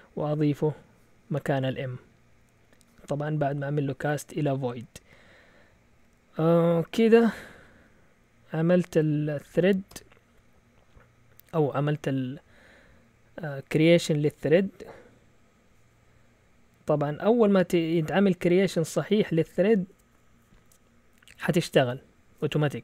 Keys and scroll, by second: 9.9 i.